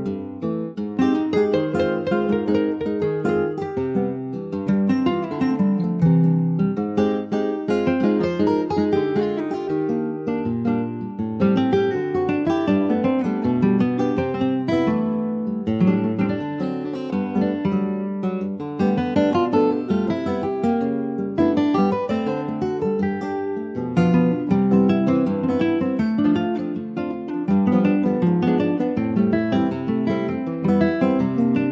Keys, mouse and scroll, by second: 0.2 ctrl+z, 0.5 middle click, 1.1 ctrl+z, 1.4-2.0 scroll up 4, 1.7 shift+middle click, 2.0 middle click, 2.6 ctrl+s, 2.8-4.5 middle drag, 4.5-5.0 scroll up 1, 5.0-5.5 scroll up 1, 5.5 s, 7.2 middle click, 7.9 s, 10.5 Tab, 10.8 click, 11.6 3, 11.8 click, 12.0 scroll down 5, 12.4 alt+middle click, 13.6 alt+middle click, 14.4 ctrl+s, 14.9 shift+middle click, 15.6 click, 16.3-17.0 scroll down 2, 17.0 alt+middle click, 17.4 scroll down 2, 17.6 shift+middle click, 18.4 click, 22.2 ctrl+s, 22.4 click, 22.7 middle click, 23.0 Tab, 23.2 click, 23.6-25.4 middle drag, 25.4 ctrl+s, 25.5 middle click, 26.1 ctrl+s, 26.3 click, 26.7 middle click, 27.2 ctrl+s, 27.7 middle click, 28.1-28.4 scroll up 1, 28.4 shift+middle click, 28.6-29.0 shift+scroll up 1, 29.0 middle click, 29.2-29.6 scroll up 1, 29.6 Tab, 30.0 shift+middle click, 30.7 ctrl+r.